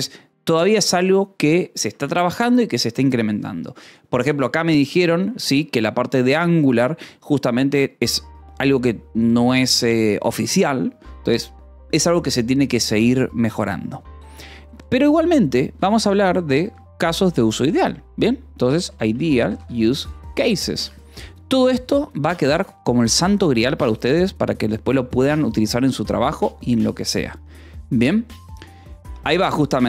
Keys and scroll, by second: 2.0 Return, 15.3 3, 15.7 space, 16.7 a, 17.0 BackSpace, 19.0-23.1 typing, 22.8 Escape, 23.5 Return.